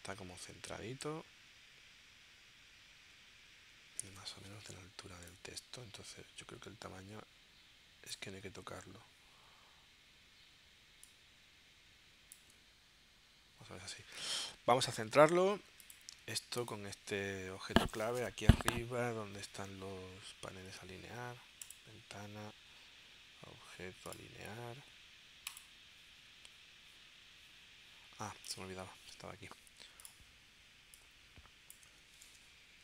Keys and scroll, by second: 4.1 super+Tab, 32.3 super+Tab.